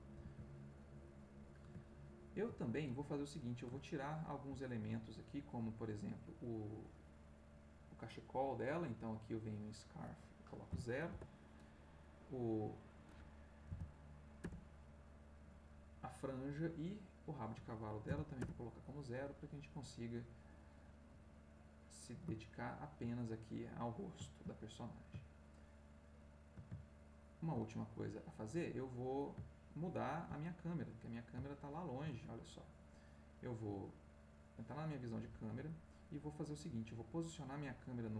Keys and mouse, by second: 0.3 ctrl+s, 1.8 ctrl+click, 3.0-5.1 drag, 9.7 click, 10.7 0, 11.1 Return, 12.4 click, 13.6 0, 14.4 Return, 17.1 click, 18.0 0, 18.4 Return, 19.1-21.0 middle drag, 21.6 click, 22.3-23.4 ctrl+middle drag, 26.8-28.5 ctrl+middle drag, 29.4-32.3 ctrl+middle drag, 32.9 click, 34.6 click.